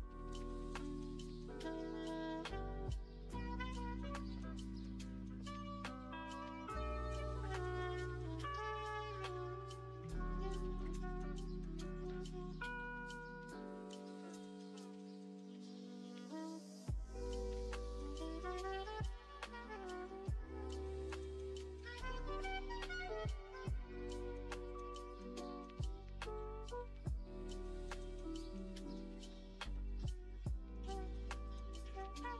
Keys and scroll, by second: 1.2 Return, 1.8 Return, 3.2 Return, 5.9 typing, 7.5 typing, 17.3 g, 27.8 ctrl+c, 29.3 ctrl+v.